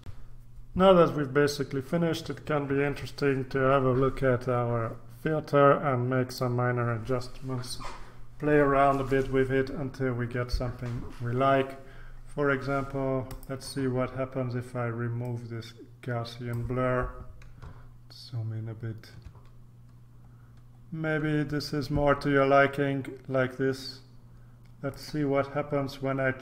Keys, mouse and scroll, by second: 0.1 ctrl+r, 6.2 click, 11.8-12.7 scroll down 1, 13.3 click, 15.2-17.1 drag, 17.8-18.5 ctrl+scroll up 2, 18.8-19.4 ctrl+scroll up 2, 20.2-21.3 scroll up 2, 21.3-23.5 scroll up 1, 24.9 click.